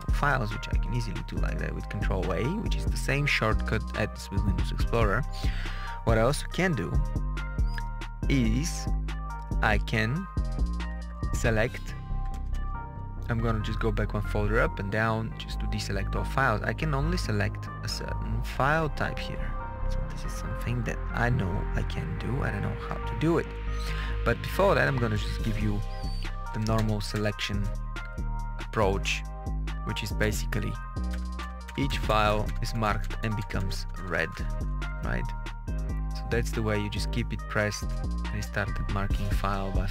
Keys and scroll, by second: 10.7 Page_Up, 12.2 Return, 15.3 Down, 17.7 Page_Down, 21.7 Page_Down, 23.1 Up, 25.6 Up, 30.1 Insert, 31.0 Insert.